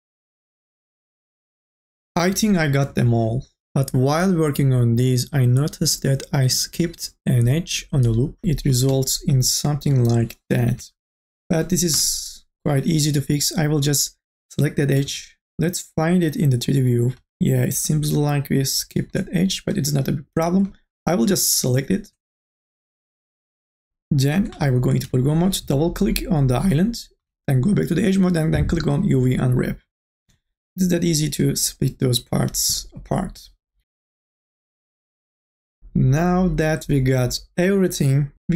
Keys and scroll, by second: 0.5 2, 1.4 3, 6.4-7.3 typing, 8.4-9.9 typing, 11.0 ctrl+z, 11.9 2, 25.0 3, 27.2 2, 30.3 3.